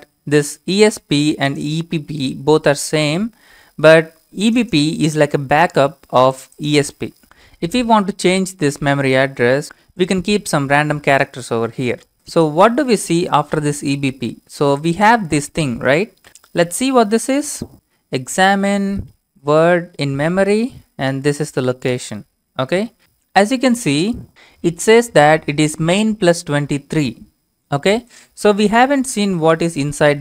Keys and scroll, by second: 16.3 ctrl+c, 16.7-18.2 typing, 19.3-20.2 typing, 21.0 ctrl+v, 22.8 Return, 29.0-30.2 typing.